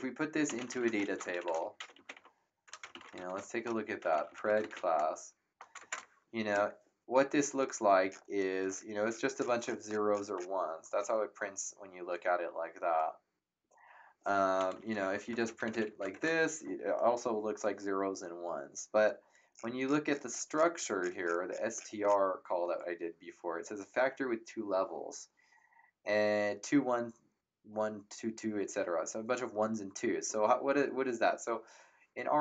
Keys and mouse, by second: 0.0-5.2 typing, 5.8 ctrl+KP_Enter, 14.7-16.2 typing.